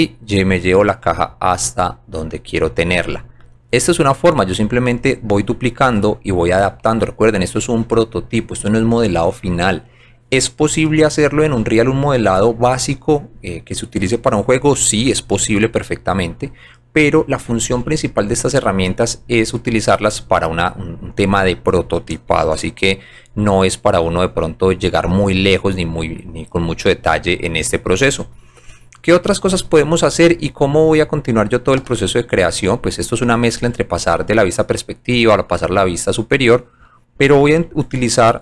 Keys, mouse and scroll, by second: 2.0 scroll down 1, 2.4 middle click, 3.5 click, 5.5 scroll down 2, 7.0-7.7 scroll up 2, 18.6-19.2 scroll up 4, 19.6-20.1 scroll down 4, 24.4 shift+middle click, 24.9 click, 25.7 scroll up 1, 26.8 scroll down 1, 27.7-28.0 scroll up 2, 32.3 alt+right click, 33.2 alt+click, 34.1 alt+middle click, 35.5 scroll down 1, 35.8 alt+click, 36.3 alt+middle click.